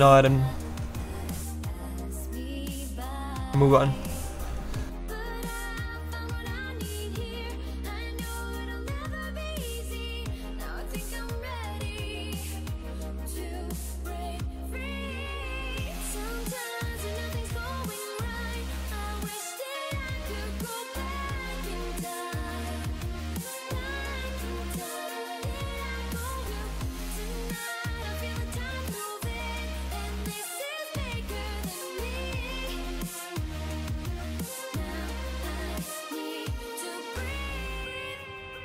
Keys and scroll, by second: 3.8 s.